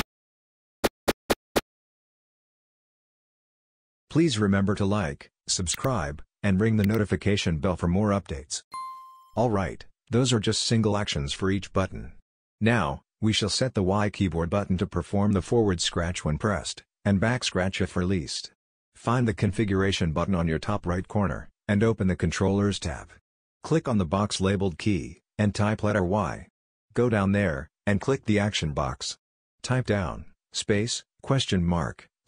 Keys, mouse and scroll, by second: 0.0-2.5 typing, 25.7 y, 26.6 y, 28.7 click, 29.7-31.1 typing.